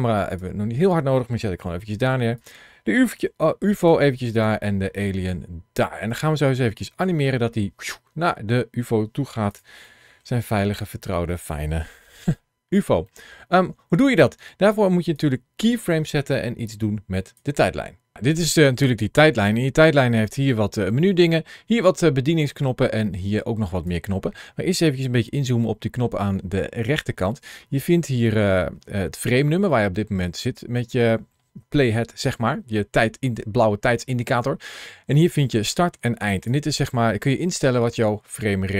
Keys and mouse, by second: 1.5 shift+middle click, 3.0 g, 3.6 click, 5.8 click, 9.3 click, 9.7 shift+middle click, 10.4 middle click, 11.1 shift+middle click, 11.9 KP_1, 12.9 middle click, 15.0-17.2 drag, 18.1 click, 19.5 ctrl+shift+a.